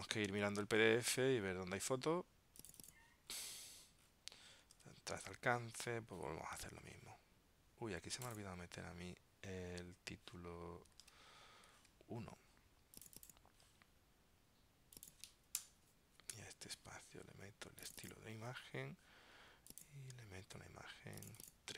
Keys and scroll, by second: 0.2 super+Tab, 4.8 super+Tab, 11.1 super+Tab.